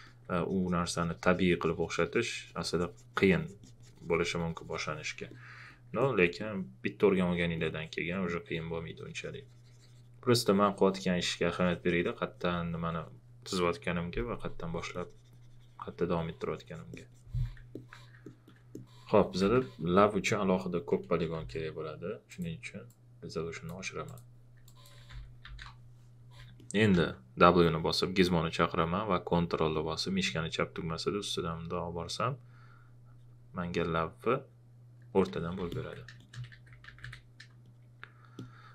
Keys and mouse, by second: 19.1 shift+f, 21.3 ctrl+z, 22.3 click, 25.1 shift+f, 26.6 alt+click, 26.9 w, 30.2 ctrl+click, 35.3-37.5 typing, 35.7 alt+click, 37.6 click.